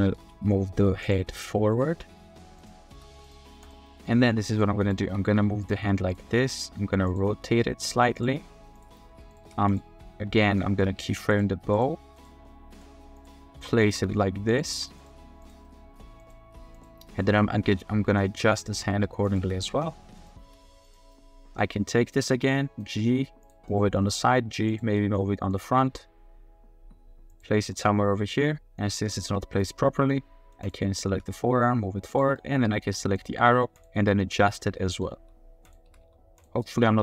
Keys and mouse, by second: 0.0 r, 0.1 z, 1.3-1.7 middle drag, 1.9-3.1 typing, 3.9 click, 4.3 r, 4.8 click, 5.1 r, 5.2 r, 5.8 r, 6.6 drag, 7.3 r, 8.8 click, 9.0 r, 9.4 r, 9.6 r, 10.4 click, 10.7 r, 12.0 r, 13.2 click, 13.5-16.0 typing, 14.5 click, 15.0 click, 15.6-16.0 drag, 16.2-17.3 drag, 17.6 r, 18.7-20.6 typing, 21.1-21.5 drag, 21.5 middle click, 21.9 middle click, 22.3 g, 23.0 g, 23.7-24.2 middle drag, 24.3 g, 24.7 click, 24.9-25.5 middle drag, 25.7 r, 25.9 r, 27.6-28.0 middle drag, 28.0-28.4 drag, 28.4-28.8 middle drag, 29.7-30.1 middle drag, 31.1 r, 32.4 click, 32.4-32.8 middle drag, 32.9 middle drag, 34.2-34.7 middle drag, 34.7 drag, 35.1-37.0 typing, 35.6 click, 36.6 click.